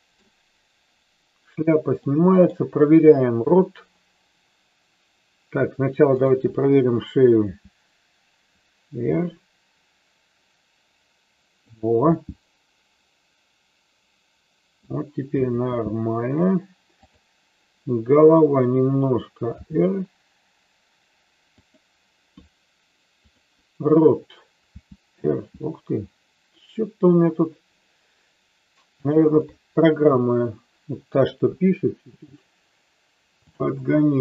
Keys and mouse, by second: 2.2 middle click, 3.4 KP_3, 6.2-7.8 drag, 7.9 r, 11.8 click, 12.2-14.9 middle drag, 15.4 KP_3, 16.9-18.7 drag, 19.5 r, 23.2-24.7 drag, 25.0 r, 29.2 click, 29.4-31.4 middle drag, 31.4 KP_3, 33.4-34.2 drag.